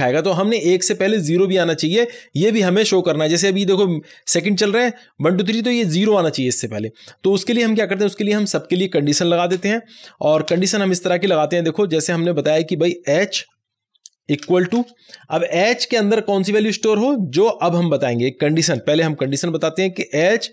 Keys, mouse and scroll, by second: 7.7 click, 7.8 click, 9.5 Return, 12.1-13.3 scroll down 1, 13.3 h, 14.3 space, 14.5 =, 14.7 space, 18.7 space, 19.2 shift+9, 20.3 typing.